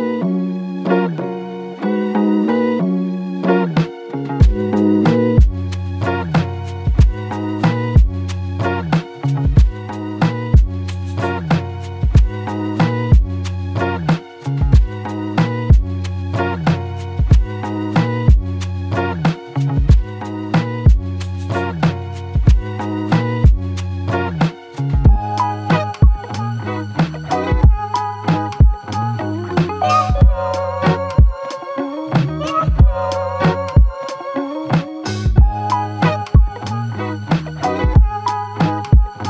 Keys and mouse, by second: 1.7 alt+click, 3.7 ctrl+click, 6.9 ctrl+click, 12.4 alt+click, 12.7 ctrl+click, 15.6 alt+click, 16.3 alt+click, 20.0 ctrl+double click, 20.3 ctrl+click, 22.6 ctrl+double click, 23.1 alt+click, 24.6 shift+click, 26.3 shift+click, 27.3 r, 34.8 double click.